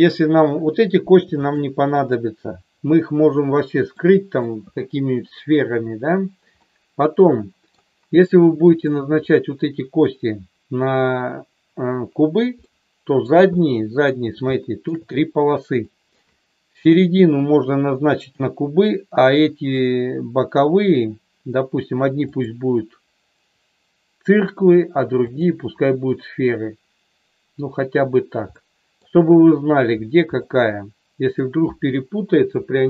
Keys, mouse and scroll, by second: 1.4-2.8 shift+drag, 3.9 middle click, 6.7-7.7 middle drag, 12.7 middle click, 13.6 middle click, 14.6 shift+middle click, 15.9 middle click, 25.3-26.6 drag, 28.6 middle click, 30.5 middle click.